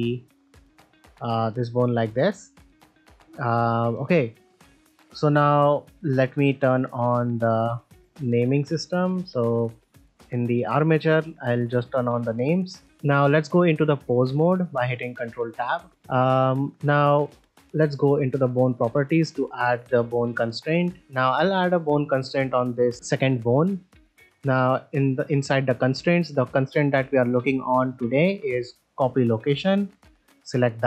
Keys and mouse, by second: 0.5 e, 3.6 middle click, 3.9 shift+middle click, 4.3 ctrl+middle click, 4.9 middle click, 6.2 ctrl+Tab, 7.4 ctrl+Tab, 8.5 click, 10.3 click, 11.8 click, 12.5 shift+middle drag, 12.8 ctrl+middle click, 13.5 ctrl+Tab, 15.1 shift+middle click, 16.0-16.6 middle drag, 19.4 click, 20.7 click, 21.3-21.8 middle drag, 24.3-29.8 drag, 30.7 middle drag.